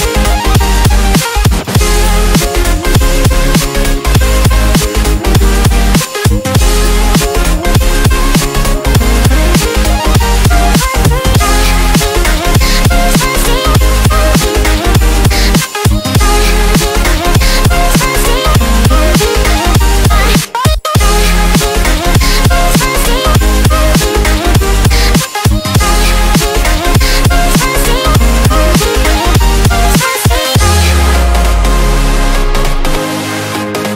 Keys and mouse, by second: 11.2 Delete, 11.6 ctrl+d, 13.4 click, 14.4 ctrl+t, 15.7-22.1 drag, 22.1 Return, 23.7 click, 25.1 ctrl+d, 26.8-33.9 drag.